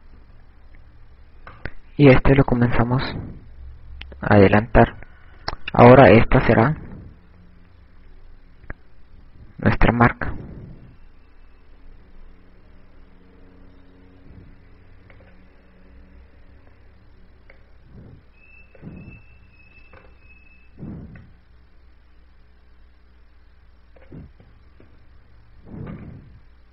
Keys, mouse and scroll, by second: 1.5 i, 3.4 right click, 4.6 click, 16.3 click, 21.0 i, 22.1 right click, 23.2 click, 24.4 i.